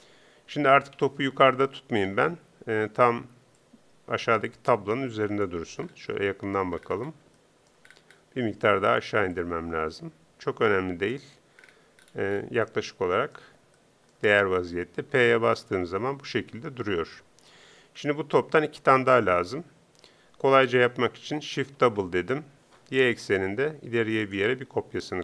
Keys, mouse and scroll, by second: 0.9 KP_3, 3.6-5.3 drag, 9.3-11.1 drag, 15.1 p, 16.8 p, 21.8 shift+d.